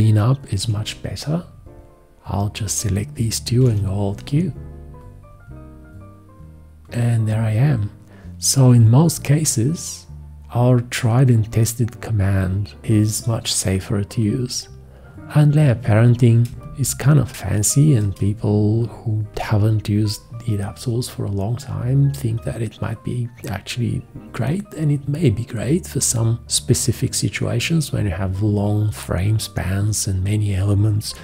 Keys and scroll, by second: 0.6 1, 3.6 alt+q, 15.7 ctrl+a, 16.5 space.